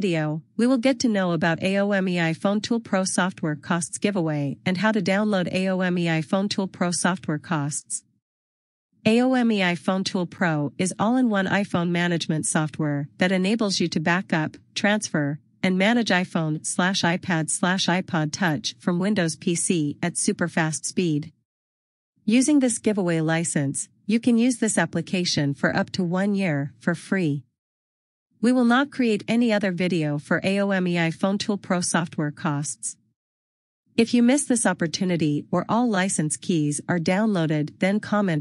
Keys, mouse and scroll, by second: 1.8 click, 3.6 click, 7.5 scroll up 1, 9.7 click, 11.1 scroll down 1, 14.3 click, 27.6 click, 30.6-31.4 scroll down 1, 34.8 click.